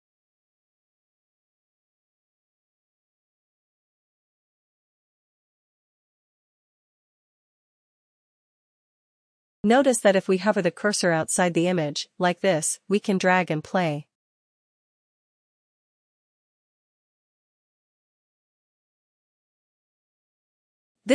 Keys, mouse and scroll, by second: 7.5 click, 18.3 click, 19.1 shift+click.